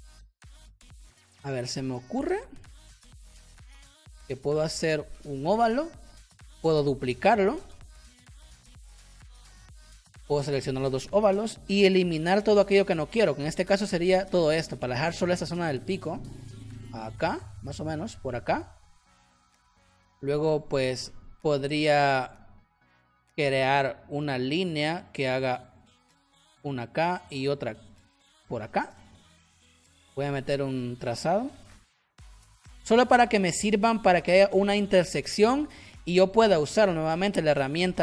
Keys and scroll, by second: 1.7 v, 12.0 shift+m, 15.6 v, 29.0 v, 31.5 shift+x.